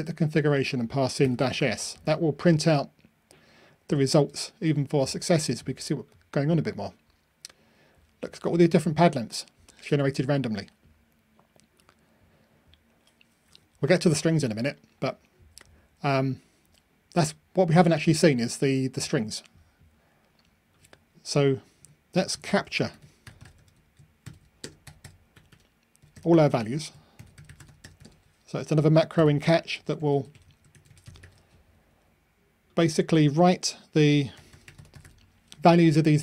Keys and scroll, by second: 4.1 ctrl+r, 30.7 super+c.